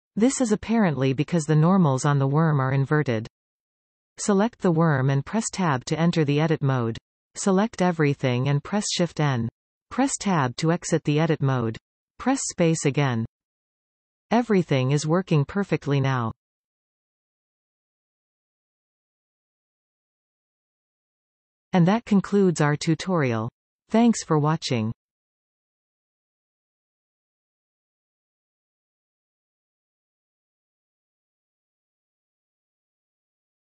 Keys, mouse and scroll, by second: 3.5 Tab, 5.8 a, 7.6 shift+n, 8.9 Tab, 11.3 space, 21.3-23.6 middle drag, 26.1-28.2 middle drag, 28.2 click, 29.2 middle click.